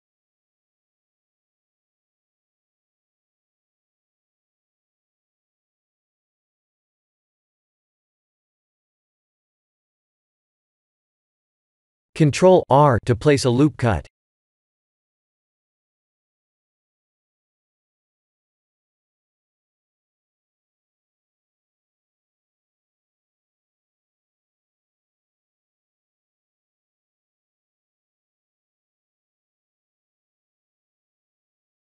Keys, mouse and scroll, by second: 1.2 e, 2.7 ctrl+z, 3.6 middle click, 4.5 s, 6.2 KP_1, 6.7 e, 9.7-12.0 scroll up 4, 12.3 ctrl+r, 16.4 ctrl+r, 18.5 Tab, 19.6 Tab, 20.3 1, 20.8 click, 21.1 b, 22.3 g, 28.2 Tab.